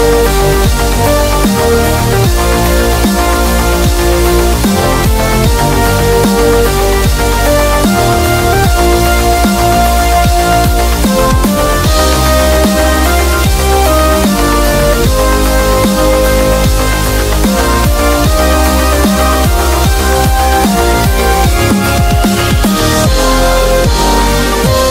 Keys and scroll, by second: 0.0-0.3 typing, 1.9-6.1 typing, 7.4 ], 9.2 typing, 15.3 ], 18.3 b.